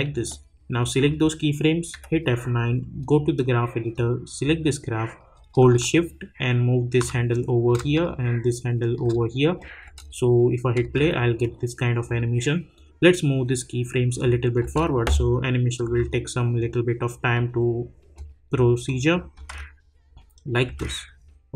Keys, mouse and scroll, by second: 0.2-1.9 drag, 1.9 F9, 3.0-6.0 drag, 6.0-9.6 shift+drag, 9.8 space, 11.4-14.3 drag, 14.6 space, 16.2-18.8 drag, 19.3 space, 21.0-21.5 scroll up 1.